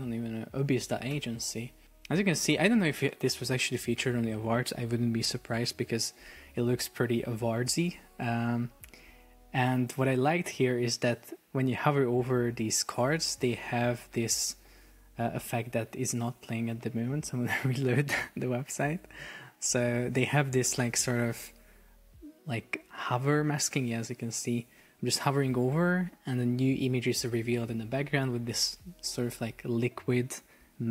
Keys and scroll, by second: 1.1 super+s, 15.9 super+r.